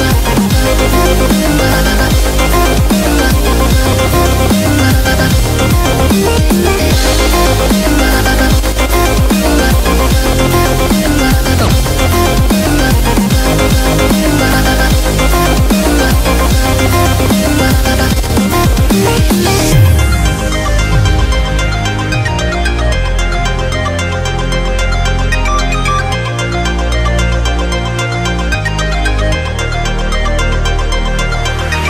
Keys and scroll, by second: 0.0-0.9 typing, 3.2-3.7 typing, 5.3 typing, 25.8 v, 26.4 shift+Down, 26.9 shift+Down, 27.4 shift+Down, 27.7 shift+Down, 28.2 shift+Down, 29.0 shift+Down, 30.0 shift+Down, 30.9 shift+Down, 31.1 shift+Down, 31.3 shift+Down.